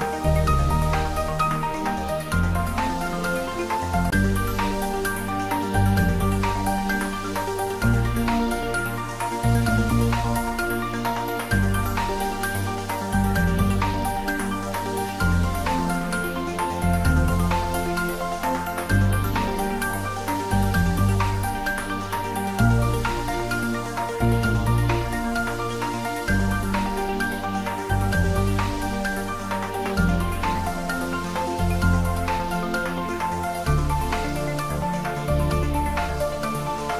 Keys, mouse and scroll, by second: 1.0-4.4 drag, 7.2-11.0 drag, 20.4 click, 24.6-25.8 typing, 26.5 click, 28.9 click.